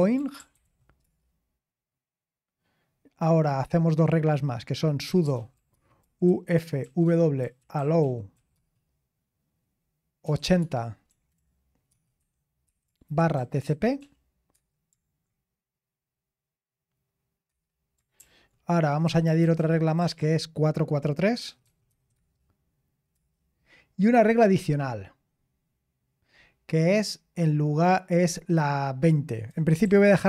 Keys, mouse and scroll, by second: 0.0-1.1 typing, 4.8-8.8 typing, 10.2-14.5 typing, 14.5 Return, 17.5 Return, 18.2 ctrl+p, 19.0 Left, 19.2 Left, 19.4 Left, 20.0 Left, 20.2 BackSpace, 22.1 BackSpace, 25.8-27.1 scroll down 1, 27.1-29.5 scroll down 1, 29.5-29.8 scroll down 1, 29.6-30.2 typing.